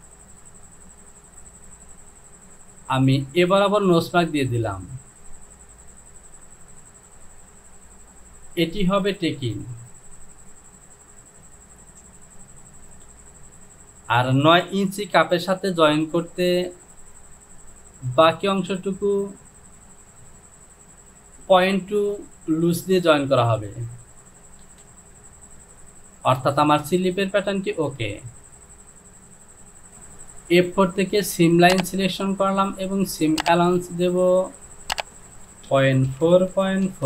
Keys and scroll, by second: 24.8 Home, 35.7 Down, 35.7-36.9 typing, 36.3 Down.